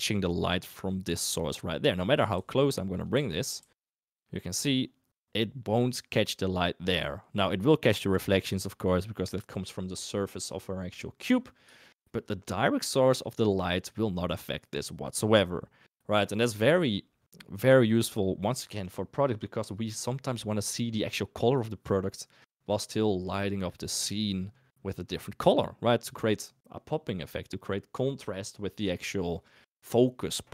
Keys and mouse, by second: 0.7 click, 1.9 middle click, 2.4 g, 3.1 r, 3.6 g, 12.5 shift+middle click.